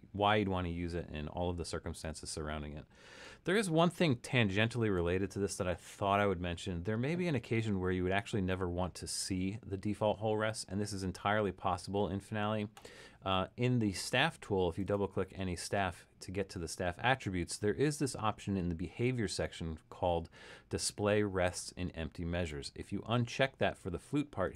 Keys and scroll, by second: 3.6 super+-.